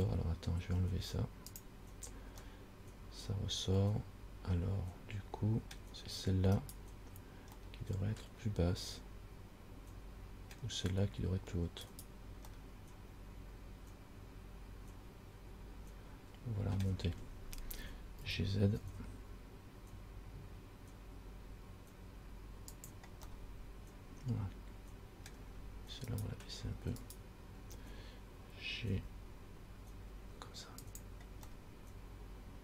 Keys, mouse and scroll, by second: 1.8 click, 2.7 middle click, 6.8 right click, 7.9 middle click, 12.1 right click, 12.8 middle click, 18.4 g, 23.6 middle click, 26.4 right click, 27.3 right click, 29.2 g, 31.7 middle click.